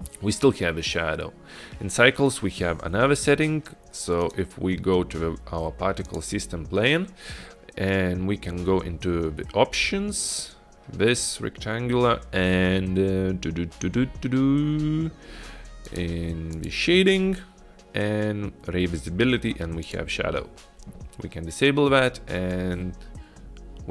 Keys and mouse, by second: 4.3 click, 6.1 click, 15.9 click, 16.6 drag, 19.9 drag.